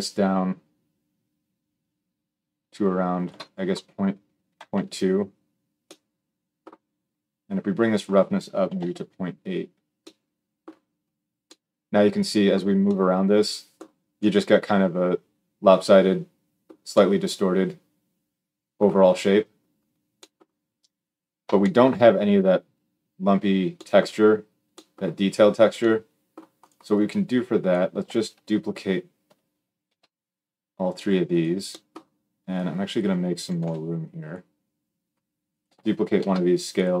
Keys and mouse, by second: 26.4 middle click, 26.7-31.2 drag, 29.6 shift+d, 31.2-32.3 middle drag, 32.3-34.1 drag, 33.4 g, 34.1-35.3 middle drag, 35.3 click, 35.4-37.0 shift+middle drag, 35.9 shift+d.